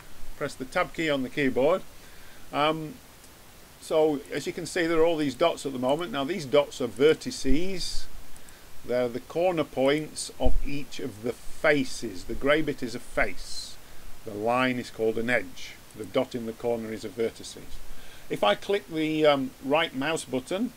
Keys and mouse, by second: 4.2-11.7 drag, 17.0-20.7 drag.